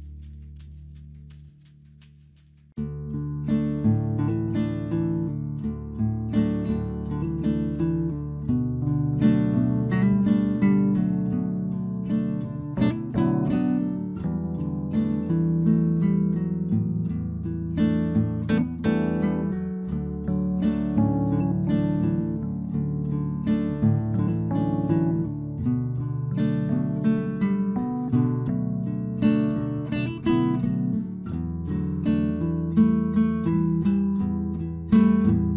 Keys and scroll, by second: 10.4 Return, 12.4 ctrl+t, 16.8 Return, 28.3 ctrl+t, 33.3 Return.